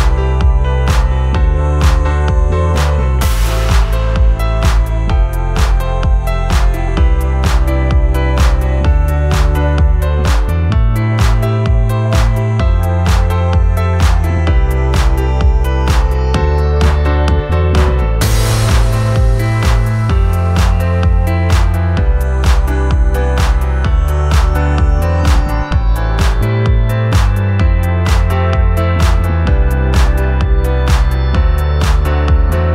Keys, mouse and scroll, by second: 27.5 ctrl+t.